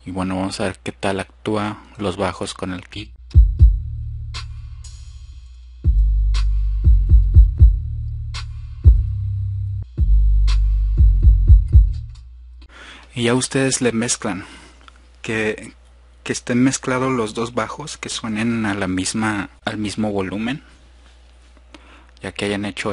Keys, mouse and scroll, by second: 6.1 click, 6.4-7.2 drag.